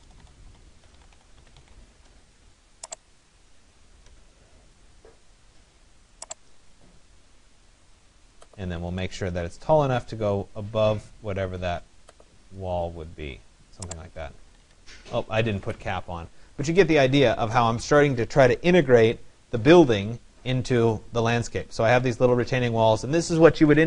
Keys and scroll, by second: 1.2-2.1 typing, 14.1 Escape.